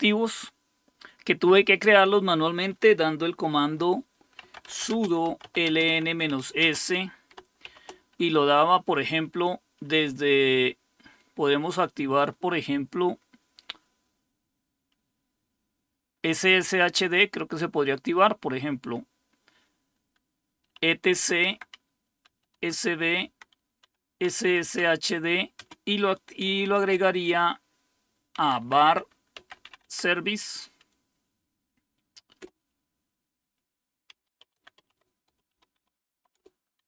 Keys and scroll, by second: 4.2-7.7 typing, 20.8-22.8 typing, 21.4 Tab, 23.3 Tab, 23.8-25.6 typing, 26.7 typing, 28.1-30.1 typing, 32.4 typing, 33.9-36.6 typing.